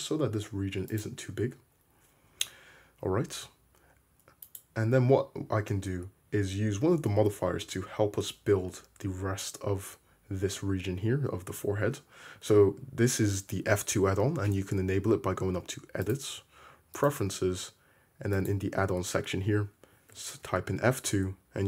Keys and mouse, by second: 1.5 Tab, 2.4 Tab, 4.6-7.3 middle drag, 7.3 1, 17.2 drag, 19.4-21.6 drag.